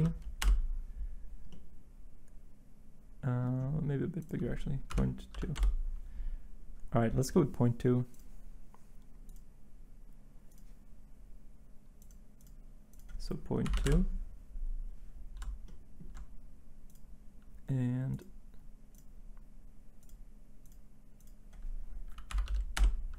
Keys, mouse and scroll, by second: 0.0-0.4 typing, 5.3 typing, 5.5 Return, 7.2 typing, 13.7 typing, 13.9 Return, 22.4 2, 22.7 Return.